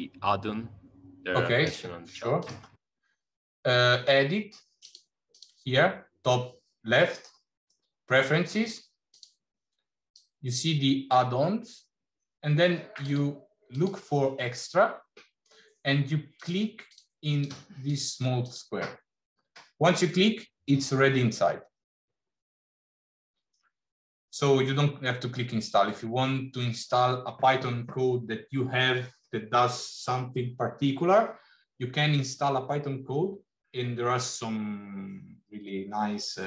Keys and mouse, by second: 2.2-4.7 drag, 5.2-9.3 drag.